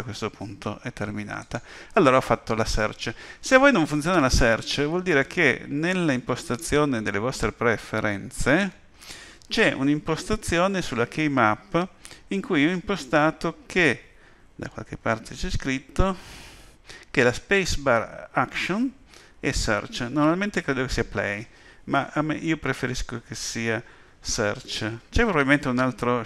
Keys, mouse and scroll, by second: 6.4 click.